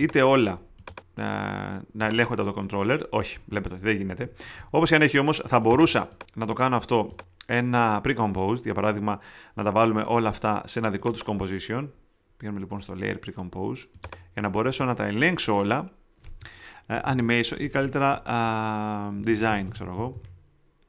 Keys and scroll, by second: 4.4 super+z, 16.7-20.6 typing.